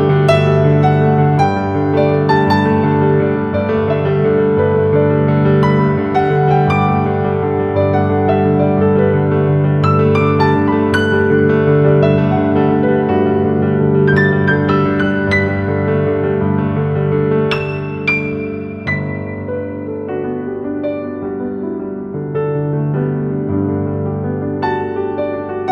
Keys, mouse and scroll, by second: 2.2-4.8 shift+drag, 5.2 shift+click, 6.2 Left, 9.8 click, 10.7 scroll up 1, 11.0-14.5 typing, 11.2 click, 11.5 click, 11.8 click, 12.8 click, 14.7 click, 17.9 right click, 18.8 click, 19.4-20.2 scroll up 1, 20.2 click, 21.3-22.1 typing, 21.6 click, 22.5 click.